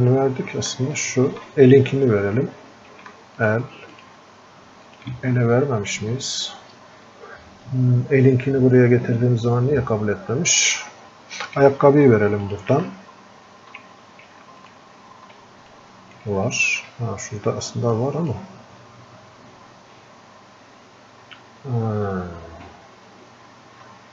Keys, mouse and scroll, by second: 16.1-24.1 drag.